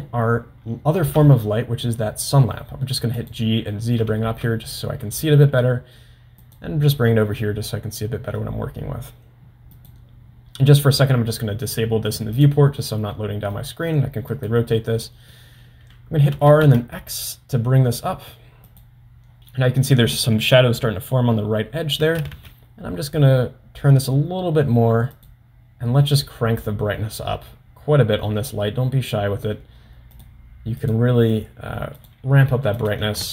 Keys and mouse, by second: 0.0 shift+a, 1.3 g, 4.6 g, 7.7-8.9 middle drag, 9.8 click, 13.6 middle click, 14.5 drag, 15.1-15.4 middle drag, 16.4 r, 22.0 r, 30.2 drag, 32.0 click, 32.9-33.3 drag.